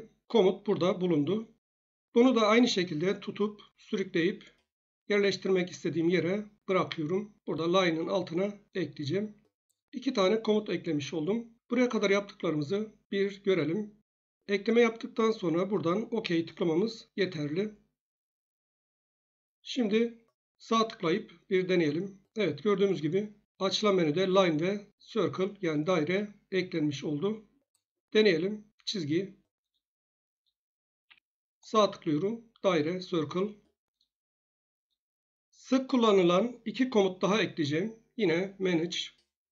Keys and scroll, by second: 31.1 Escape.